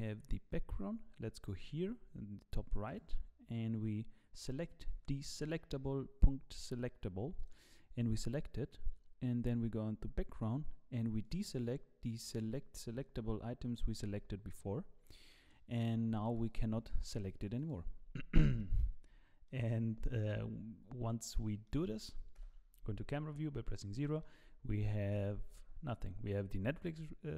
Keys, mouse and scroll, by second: 2.9 click, 11.2 click, 15.0 scroll down 2, 15.3 middle click, 15.8-16.1 scroll up 1, 16.1 click, 16.3 click, 17.2 click, 17.6 click, 18.6 shift+middle click, 19.0 scroll up 2, 19.4 middle click, 20.0 shift+middle click, 20.8-21.5 scroll up 4, 21.5 scroll down 1, 21.6 middle click, 22.3 KP_0, 23.3-24.0 scroll up 5, 24.0 shift+middle click, 25.5 z.